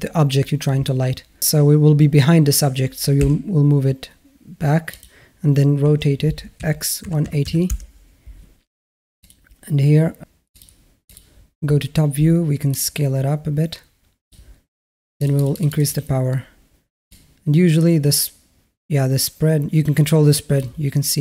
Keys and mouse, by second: 1.4 g, 5.6 r, 10.4 click, 11.0 click, 12.5-14.3 drag, 15.3 click, 15.6 click, 16.9-20.6 drag.